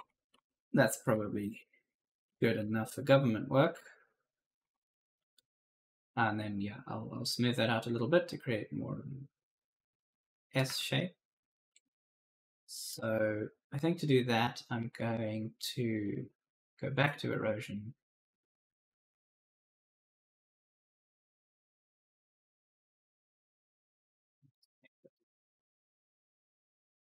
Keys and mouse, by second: 0.0-5.0 typing, 10.3-11.2 typing, 10.4 right click, 12.7 w, 15.8 click, 19.7 click, 20.9-21.8 typing, 21.0 right click, 22.7 click, 24.5-27.0 typing, 24.6 right click.